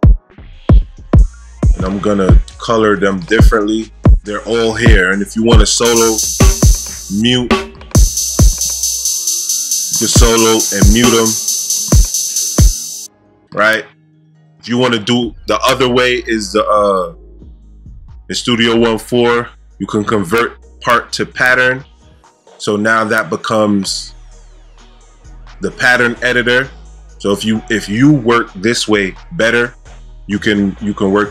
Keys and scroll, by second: 12.5 space.